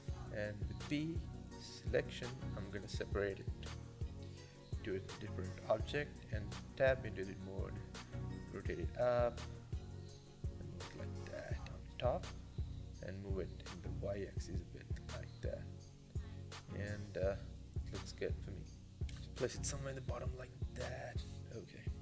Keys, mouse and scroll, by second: 2.0 Tab, 2.5 click, 3.2 g, 3.8 Tab, 4.1 a, 4.7 g, 6.7 r, 7.5 r, 9.5 g, 10.9 scroll down 2, 11.2 middle click, 11.8-12.3 scroll down 8, 12.3 middle click, 13.0 g, 13.9 g, 15.9 KP_0, 16.6-17.8 scroll up 5, 17.8 s, 19.0 g.